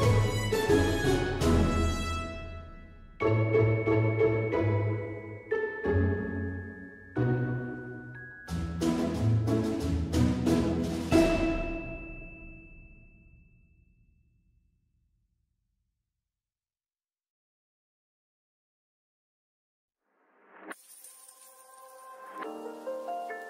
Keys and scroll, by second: 2.7 ctrl+z.